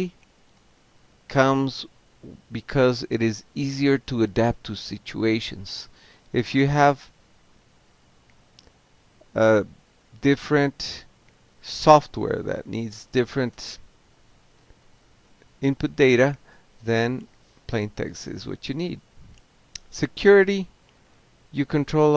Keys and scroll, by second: 0.0-0.6 typing, 1.0 Tab, 2.2 c, 2.4 Tab, 4.0 alt+q, 5.8 c, 6.2 k, 6.9 c, 7.7 ctrl+c, 8.3 ctrl+k, 9.3 0, 9.8 3, 10.4 Return, 12.1 Delete, 12.2 Delete, 13.9-14.7 typing, 16.8 ctrl+c, 17.0 ctrl+a, 18.4-19.6 typing, 21.5-22.1 typing.